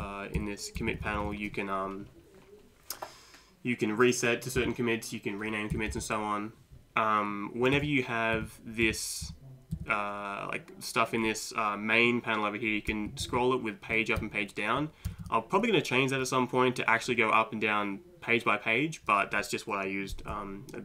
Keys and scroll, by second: 0.0 Down, 0.4 Down, 0.8 Up, 1.2 Up, 1.3 Up, 4.6 Down, 5.7 Down, 7.8 Down, 8.4 Down, 8.8 Down, 9.2 Up, 9.7 Down, 12.9 Page_Down, 13.2 Page_Down, 13.4 Page_Down, 13.7 Page_Down, 13.8 Page_Down, 13.9 Page_Down, 14.8 Page_Up, 15.2 Page_Up.